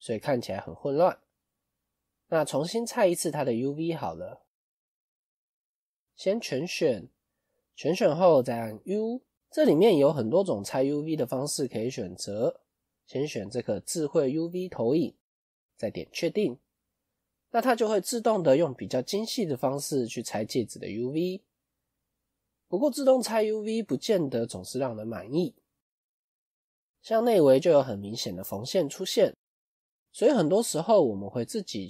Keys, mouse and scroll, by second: 3.5-3.9 scroll up 1, 3.9 middle click, 4.7 scroll down 1, 5.4 middle click, 6.1 a, 18.0 middle click, 23.1-23.5 scroll up 2, 25.8 middle click, 26.5 middle click, 27.1 scroll down 2, 27.2 scroll up 1, 27.3 middle click, 28.2 middle click, 30.4 middle click, 31.6 scroll up 1.